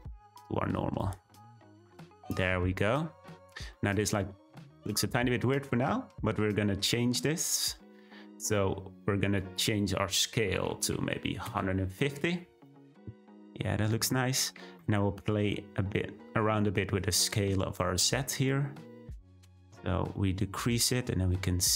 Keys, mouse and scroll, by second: 2.4-11.4 shift+middle drag, 11.4-21.7 drag.